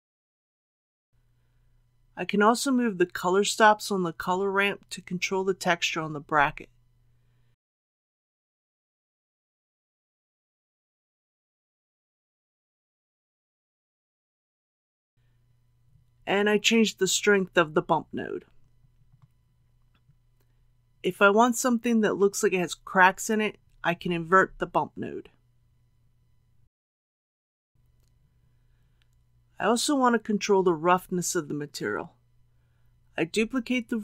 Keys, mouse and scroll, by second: 1.1 scroll down 1, 2.3-13.8 drag, 15.1 middle click, 15.8 click, 16.5 KP_Decimal, 16.8 KP_1, 17.0 KP_5, 25.0 click, 28.1-31.7 middle drag, 31.7 scroll up 1, 31.9 scroll down 1, 32.5 click, 33.6 shift+click.